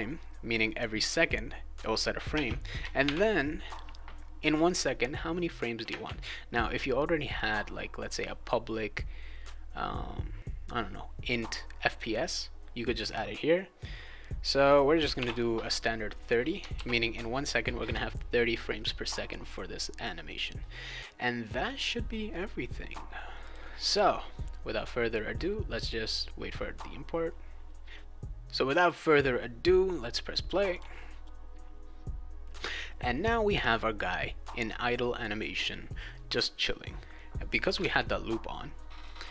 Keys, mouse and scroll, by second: 2.3 space, 3.0 shift+8, 5.8 space, 14.7-15.6 typing, 16.7 ctrl+s, 23.4 click, 30.7 click, 31.2 click, 37.8 alt+Tab, 39.2 click.